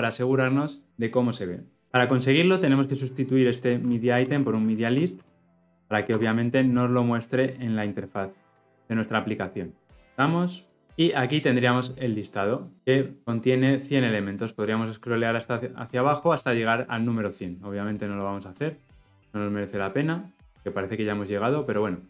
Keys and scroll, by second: 0.2 shift+F10, 6.3 Return, 8.5 shift+F10.